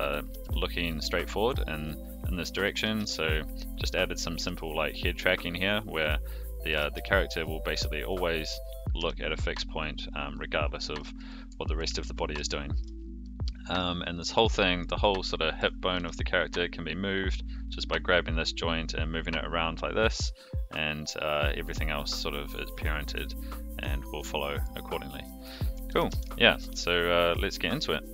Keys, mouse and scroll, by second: 0.3 g, 2.6 click, 2.7 r, 4.2 click, 4.4 g, 6.5 click, 6.7 r, 9.0 g, 10.3-11.0 middle drag, 11.1 a, 11.6 alt+g, 11.8 alt+r, 12.4-12.8 shift+middle drag, 13.2-13.8 middle drag, 15.3 shift+middle drag, 15.9 g, 24.0-24.7 middle drag, 25.2 middle drag, 25.7 a, 25.9 alt+g, 26.1 alt+r.